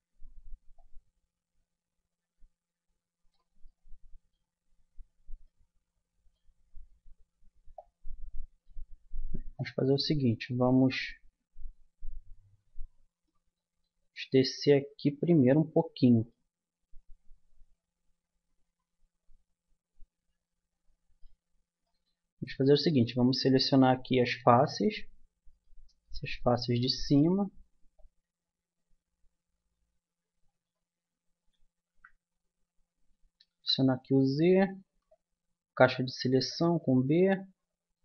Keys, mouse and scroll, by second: 0.7-2.5 drag, 7.7-10.7 drag, 11.1 Tab, 12.6 Tab, 13.1 click, 14.3 Tab, 14.7-17.5 middle drag, 21.4-24.0 middle drag, 25.5-27.5 right drag, 27.5-28.7 middle drag, 28.7-29.7 drag, 31.6 ctrl+z, 33.5 z, 34.8 b, 37.9-38.0 drag.